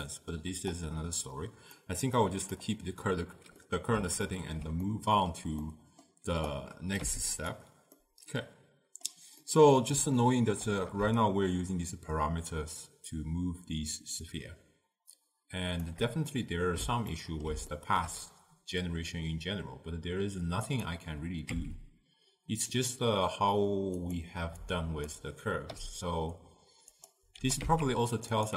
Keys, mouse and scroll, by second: 0.1-0.8 middle drag, 0.8-3.7 drag, 3.7-6.6 middle drag, 6.6 click, 7.1 g, 8.1-11.3 middle drag, 11.3-14.3 shift+drag, 16.4-20.8 middle drag, 20.8 click, 21.7 Tab, 24.1 click, 25.8 r, 27.4 g.